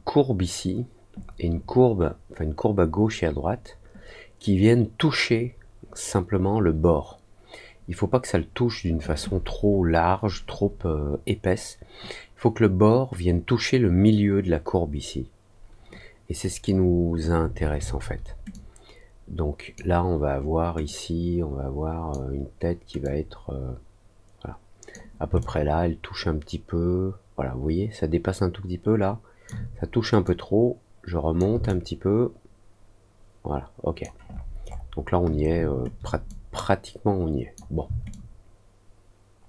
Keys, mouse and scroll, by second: 18.5-19.7 drag, 20.8-22.0 drag, 23.0-24.8 drag, 25.3-29.4 alt+drag, 30.2-31.3 drag, 31.6-34.0 alt+drag, 34.2 alt+middle click, 34.6 alt+middle click, 36.2-37.5 drag, 38.0-39.4 alt+drag.